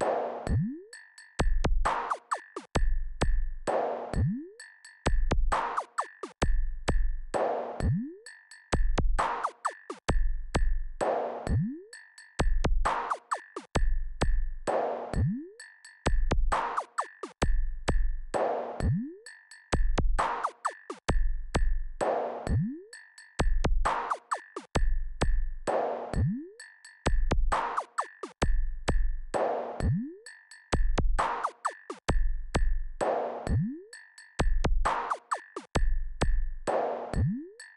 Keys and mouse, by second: 1.4 click, 2.5 click, 4.0-5.7 drag, 11.9-14.0 drag, 15.9 click, 32.7 x.